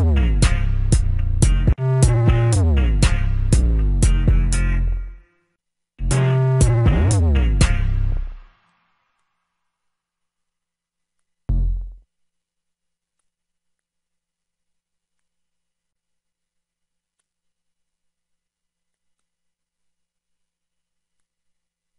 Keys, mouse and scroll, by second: 15.4 F1.